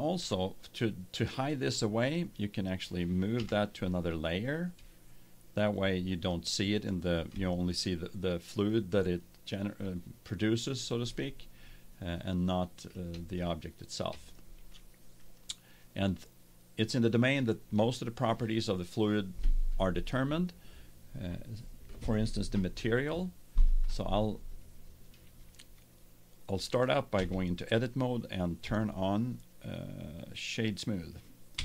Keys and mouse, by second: 3.3 m, 10.9-12.6 middle drag, 15.1-17.1 drag, 17.1-27.1 middle drag, 27.1 Tab, 28.6 w, 31.5 Tab.